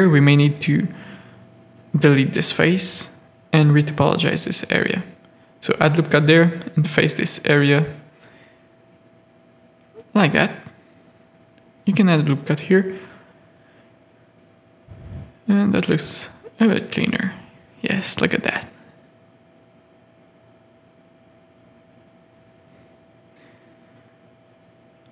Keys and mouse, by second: 0.6 ctrl+z, 0.9 x, 2.0-7.0 typing, 4.9 ctrl+r, 6.3 click, 7.5 click, 8.0 ctrl+z, 8.4 ctrl+z, 9.1 1, 10.1 f, 10.3 a, 10.4 middle click, 11.4 ctrl+r, 12.0-13.7 typing, 12.6 click, 13.2 Tab, 15.0 z, 15.9 middle click, 17.4 middle click, 19.1 middle click, 20.2-23.0 middle drag, 23.3 middle click, 24.4 KP_3.